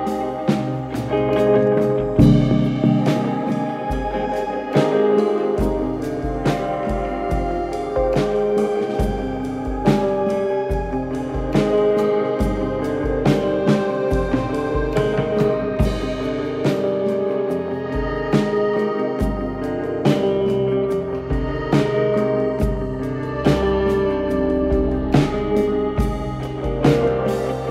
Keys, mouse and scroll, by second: 0.0-0.2 typing, 1.3 click, 3.9 click, 7.7 click, 9.0 ctrl+alt+middle click, 9.9 middle click, 11.5 click, 12.0-13.1 typing, 15.0 click, 18.8-20.1 drag, 21.3 click, 23.4 click, 23.7 n, 25.9 click, 27.4 click, 27.6 click.